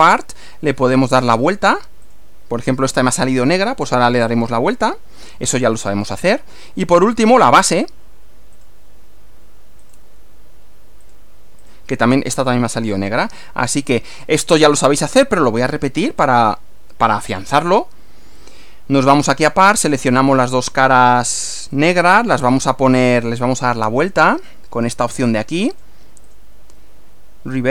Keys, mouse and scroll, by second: 1.3 click, 2.1 click, 4.3-5.4 middle drag, 5.9 click, 7.2 click, 8.6 click, 9.8 click, 11.0 click, 11.7 click, 12.0-13.2 middle drag, 13.7 click, 15.4 click, 16.2 scroll down 1, 16.6 middle click, 17.4-18.7 middle drag, 19.7 click, 20.1-20.9 middle drag, 21.7 ctrl+click, 22.4-23.4 ctrl+middle drag, 24.4 click, 25.8 click, 26.2 click.